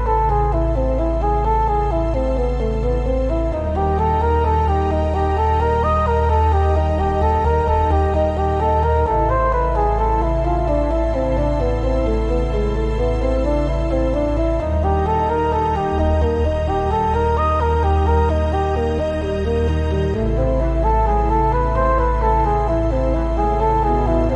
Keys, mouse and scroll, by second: 0.6 scroll down 1, 0.8 Tab, 1.2 click, 1.8 x, 2.3 Escape, 2.6 s, 4.3 right click, 4.9 s, 7.2 shift+click, 7.6 Tab, 7.9 scroll up 1, 8.6-9.7 scroll down 1, 10.0 Tab, 10.3 click, 11.4 s, 13.2 click, 13.4 g, 15.2 click, 15.4 s, 16.5 click, 16.6 scroll up 1, 16.9-18.0 shift+middle drag, 17.2 g, 18.0 click, 18.4 Tab, 18.6 scroll down 1, 18.8 shift+middle click, 19.3 Tab, 19.6 click, 20.0-20.4 scroll up 1, 20.4 s, 21.7 click, 21.8 g, 23.7 click, 23.8 scroll down 1, 24.1 Tab.